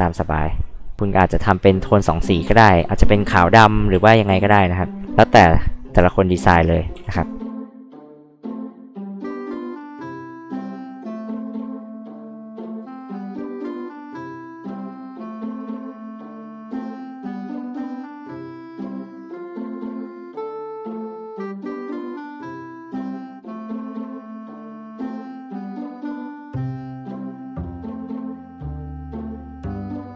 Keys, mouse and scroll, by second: 0.1 click, 2.4 click, 3.4 click, 3.9 space, 4.1 click, 4.3 click, 6.9 p, 7.6 click, 8.8 click, 8.9 click, 9.9 ctrl+z, 10.1 ctrl+z, 11.0 click, 11.8 h, 12.0 click, 13.5 click, 14.3 ctrl+z, 14.9-16.6 drag, 16.8 e, 17.0-18.1 drag, 19.4 click, 20.9 click, 21.6 click, 21.6 e, 22.3 ctrl+z, 22.6 ctrl+z, 23.5 ctrl+z, 24.5 p, 26.1-27.8 drag, 28.9 click, 29.7 click, 30.0 click.